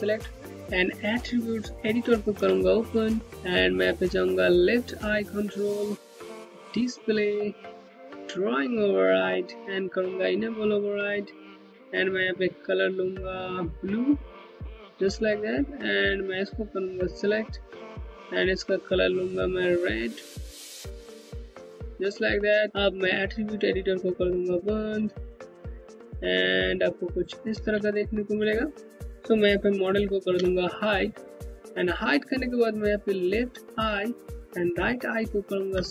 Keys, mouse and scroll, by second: 1.8 ctrl+a, 4.5 a, 6.8 scroll down 1, 8.2 click, 8.8-9.9 scroll down 1, 9.9 click, 16.1 Home, 19.3 Home, 23.6 click, 24.6 scroll down 1, 25.1 Home, 25.1 alt+click, 27.5 scroll up 1, 29.8 alt+2, 30.5-32.8 scroll up 1, 33.2 click, 35.1 ctrl+click.